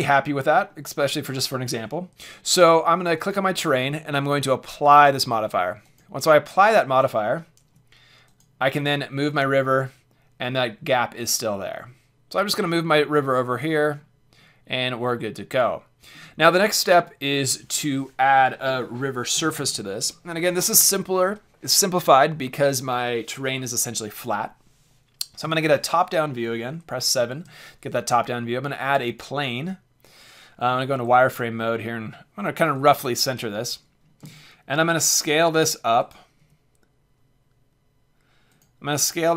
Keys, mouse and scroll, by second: 2.5 drag, 2.6-3.0 middle drag, 3.2-5.1 drag, 5.1 middle click, 5.8-7.8 drag, 7.6 alt+h, 7.8 middle click, 8.3-10.9 drag, 13.9-17.3 middle drag, 17.3 click, 17.4 middle click, 25.4 KP_7, 27.3 shift+a, 30.5 z, 30.9 g, 32.8-34.8 drag, 34.2 s, 36.1-38.5 drag, 36.3 g, 38.6 click.